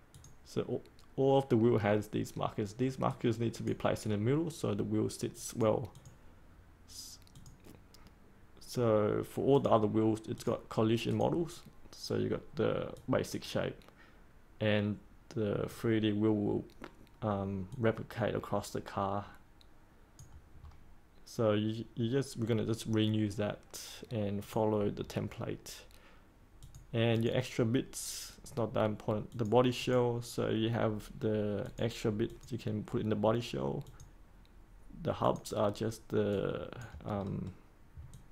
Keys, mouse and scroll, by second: 20.5 scroll up 1, 24.4 click, 37.2-38.1 scroll down 1, 38.1-38.3 drag.